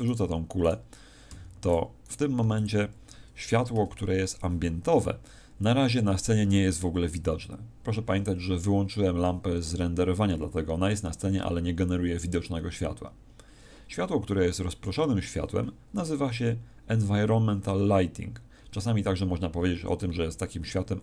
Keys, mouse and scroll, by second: 0.2 x, 1.6 right click, 2.2 right click, 2.4 x.